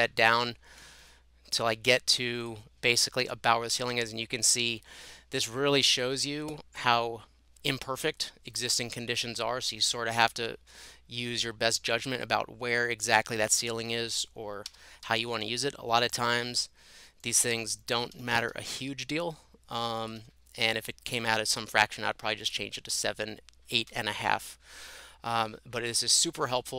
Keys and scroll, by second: 1.0 Up, 14.4-15.6 typing, 17.1-17.8 typing, 18.1 Escape, 18.3 Escape, 18.5 Escape, 20.2 Escape.